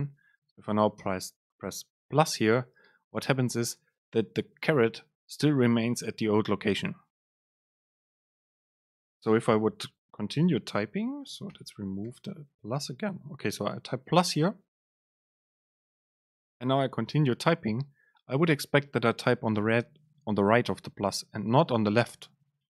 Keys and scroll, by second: 10.7 Right, 11.6 super+z.